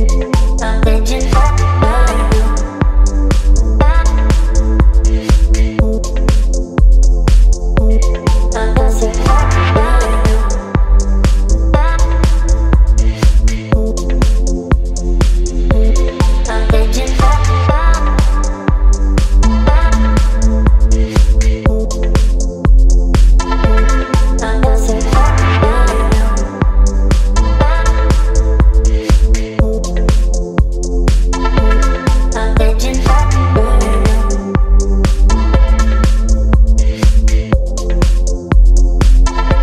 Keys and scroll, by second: 0.5 Delete, 2.3 Delete, 3.8 space, 4.2 space, 5.0 space, 5.4 space, 7.5 space, 8.2 space, 9.8 Delete, 10.9 Delete, 12.1 Delete, 13.4 Delete, 14.4 Delete, 15.2 space, 16.6 Delete, 17.6 ctrl+BackSpace, 19.6 space, 22.7 space, 24.0 Delete, 25.0 Delete, 25.8 Delete, 26.9 space, 28.5 Delete, 29.5 Delete, 30.2 Delete, 31.5 v, 35.6 space, 36.8 space, 37.9 space, 38.4 space.